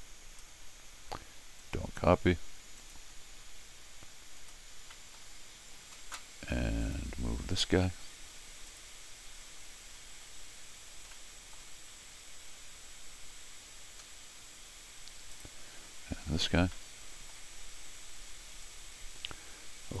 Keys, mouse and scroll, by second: 1.6 click, 2.8 click, 4.4 click, 4.9 middle click, 6.8 click, 7.3 scroll up 1, 8.7 click, 11.1 middle click, 14.0 middle click, 14.3 middle click, 15.3 click, 16.2-16.7 scroll down 2, 16.7 middle click, 18.6-20.0 drag.